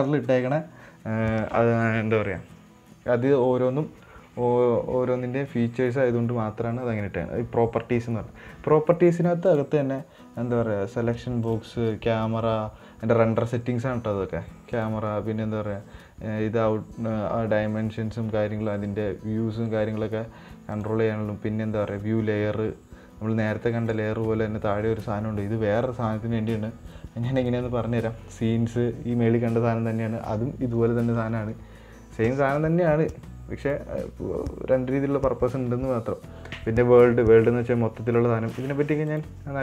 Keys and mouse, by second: 11.9 click, 15.1 click, 21.1 click, 34.0 click.